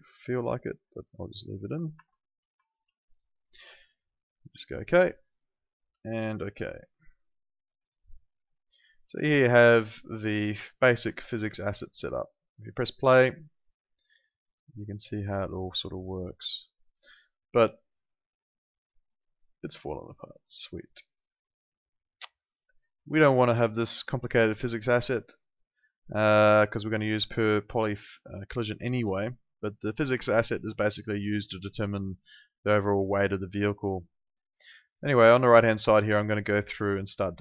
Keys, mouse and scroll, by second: 2.0-3.3 typing, 4.7 click, 9.4 right click, 10.3 click, 17.0 click, 21.9 click, 26.9 click, 36.3 click.